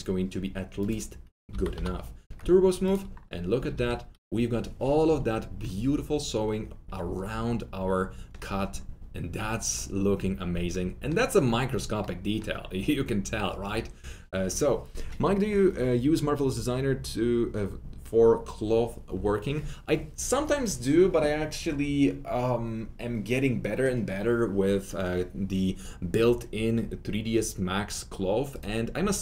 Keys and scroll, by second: 1.4 t, 2.2 Return, 3.5 F3, 3.7 F3, 3.8 F4.